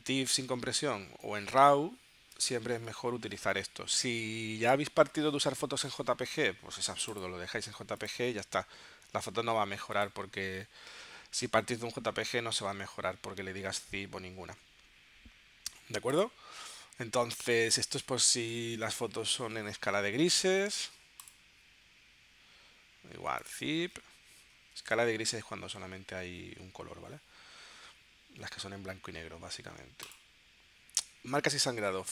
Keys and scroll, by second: 18.4 3.